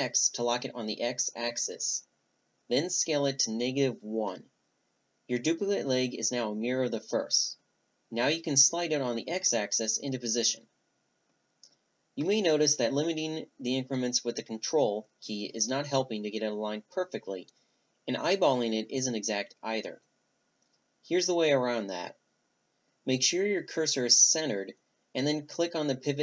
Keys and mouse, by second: 13.5 Delete, 15.7 b, 17.5-19.2 drag, 19.4-22.5 right drag, 22.5-24.1 drag.